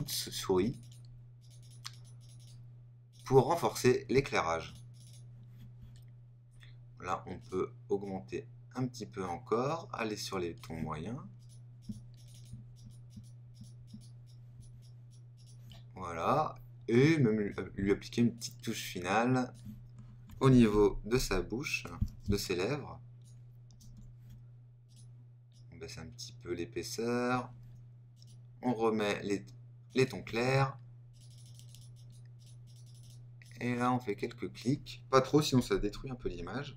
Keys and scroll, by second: 20.7 super++, 35.7 super+-.